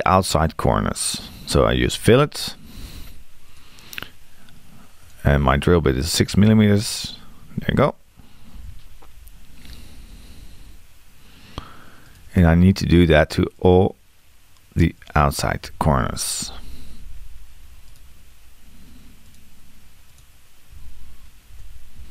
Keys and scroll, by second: 6.5 6, 8.6 Return, 15.7 6, 20.8 6.